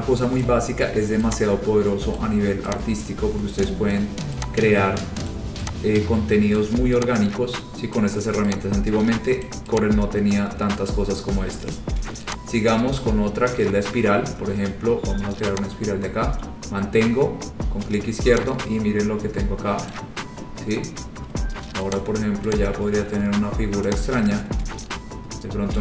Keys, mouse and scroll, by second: 0.5 click, 2.3 click, 4.1 click, 5.5 click, 6.7 click, 8.1 click, 9.7 click, 11.0 click, 13.7 click, 14.5-15.1 scroll, 17.2 click, 20.1 click, 22.1 click, 22.4 scroll, 22.7 click.